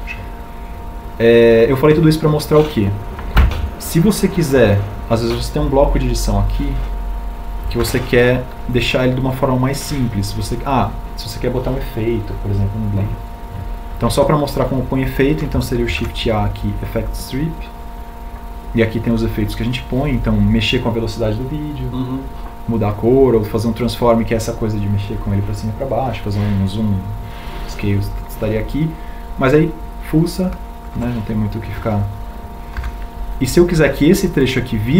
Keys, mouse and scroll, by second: 7.8 b, 16.4 shift+a, 33.0 b.